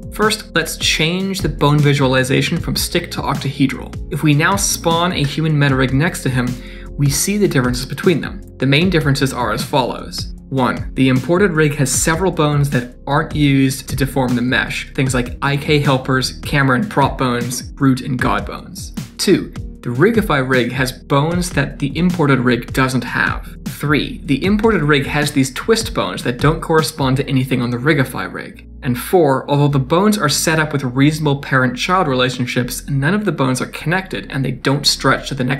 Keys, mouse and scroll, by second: 0.5 click, 1.1 click, 4.1 Tab, 4.5 shift+a, 5.3-5.8 scroll down 3, 5.8 g, 6.5 middle click, 6.6 shift+middle click, 6.8 scroll up 2, 7.2 click, 7.7 middle click, 10.1 shift+middle click, 10.6 scroll up 3, 10.9 middle click, 11.6 click, 13.0 click, 16.2 click, 19.1 scroll down 3, 19.2 d, 19.3 right click, 19.4 d, 19.5 middle click, 19.6 shift+middle click, 20.2 click, 21.2 click, 23.6 d, 23.6 right click, 23.7 d, 23.8 shift+middle click, 24.1-24.6 scroll up 4, 24.2 middle click, 24.6 shift+middle click, 25.0 click, 25.7 click, 26.3 shift+middle click, 27.2 click, 27.9 shift+right click, 28.7 d, 28.7 right click, 28.8 d, 28.8 middle click, 28.9 shift+middle click, 29.3 scroll down 1, 29.3 scroll up 3, 29.4 shift+middle click, 29.5 middle click, 30.5 click, 31.3 click, 32.5 click, 34.9 click.